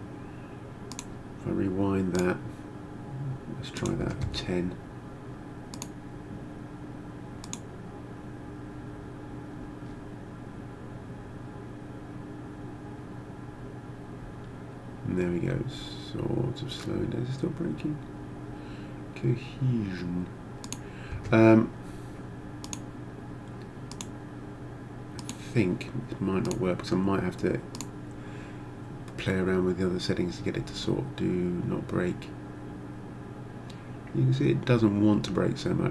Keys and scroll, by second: 4.1 0, 4.3 Return, 21.1 0.